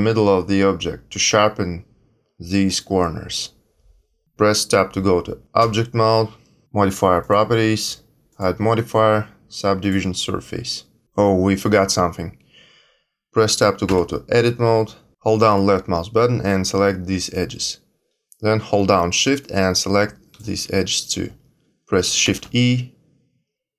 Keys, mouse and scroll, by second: 5.5 Tab, 7.2 click, 13.8 Tab, 15.5 click, 19.3 shift+click, 22.2 shift+e.